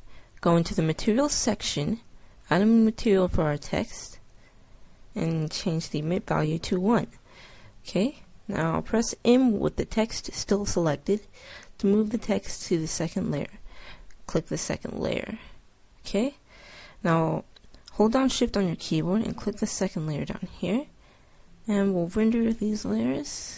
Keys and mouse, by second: 1.4-4.3 drag, 4.4-6.1 drag, 7.8 middle click, 9.1 m, 19.4 click, 20.9 click, 21.1 middle click.